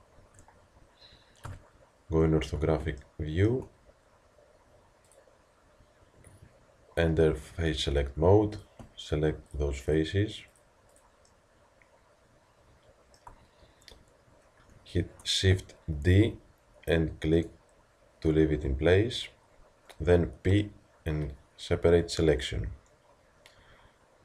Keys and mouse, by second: 0.2 Tab, 1.5 KP_5, 5.1-16.0 middle drag, 16.0 shift+d, 20.5 p.